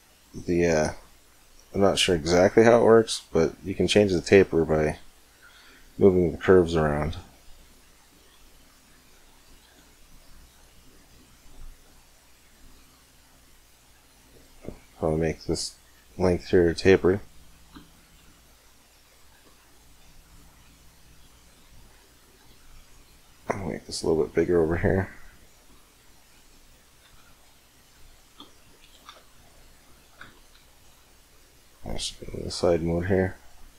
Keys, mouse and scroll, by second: 4.8-7.3 middle drag, 7.3-9.1 right drag, 7.9 r, 9.4 g, 10.9-12.7 right drag, 11.7 g, 14.2-22.1 middle drag, 19.1 Tab, 19.5-21.2 right drag, 21.7 Tab, 22.3-25.7 right drag, 22.9 Tab, 24.5 g, 26.8 Tab, 27.1-28.9 right drag, 27.7-28.9 middle drag, 28.9 Tab, 29.1 middle click, 29.7 middle click, 30.4 KP_1, 30.7 KP_5, 33.4-33.7 right drag.